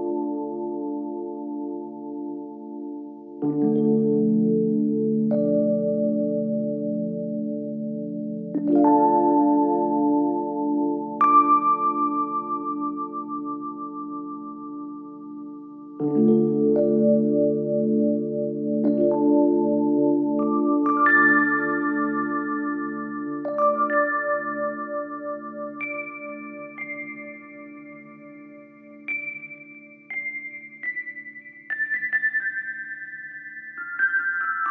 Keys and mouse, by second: 1.9 click, 1.9 right click, 7.7 Tab, 8.7 Tab, 9.0 3, 10.2 g, 13.1-14.2 middle drag, 15.7 shift+middle click, 16.5-18.0 middle drag, 18.3 middle click, 18.9 shift+middle click, 19.8 shift+middle click, 20.4 shift+middle click, 22.0-24.6 middle drag, 25.6 shift+middle click, 26.9 Tab, 27.4 click, 27.8-28.7 middle drag, 29.1 g, 33.0 s.